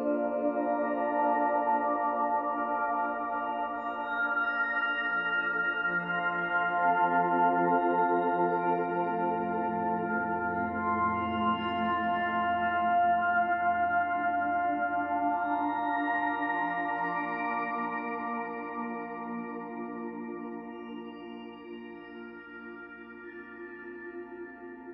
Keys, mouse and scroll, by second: 0.7-1.0 scroll up 3, 1.0 shift+middle click, 1.2-1.6 scroll down 2, 1.6 ctrl+s, 2.2-2.8 middle drag, 2.8 scroll up 1, 2.9 ctrl+s, 3.0-3.9 middle drag, 3.9 ctrl+s, 4.5 scroll down 2, 4.7-7.7 middle drag, 8.9 ctrl+s, 9.2-12.2 middle drag, 15.4-15.9 middle drag, 15.9-16.5 scroll up 4, 16.5-16.9 middle drag, 16.9-17.5 scroll down 2, 17.5 s, 18.2 ctrl+a, 19.0-19.4 middle drag, 19.4 Tab, 19.6-20.7 middle drag, 20.7 click, 21.5 k, 22.0 l, 22.2-23.4 middle drag, 23.4 g, 24.5 middle click, 24.8 ctrl+z.